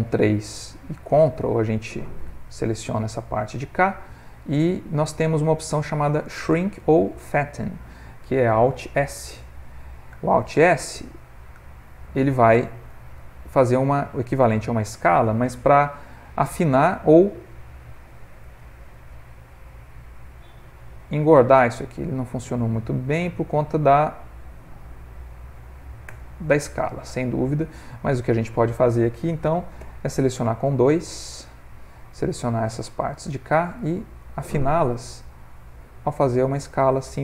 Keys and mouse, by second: 0.4 middle click, 1.3 ctrl+click, 2.2 ctrl+click, 2.7 middle click, 3.5 middle click, 5.1 middle click, 6.5 middle click, 7.0 middle click, 7.5 ctrl+middle click, 8.1 middle click, 10.0 alt+s, 12.1 middle click, 12.7 ctrl+middle click, 13.0 middle click, 13.6 s, 16.3 middle click, 18.5 alt+s, 27.9 middle click, 29.9 2, 30.6 click, 31.5 ctrl+click, 32.3 click, 33.3 middle click, 34.1 ctrl+click, 35.1 s.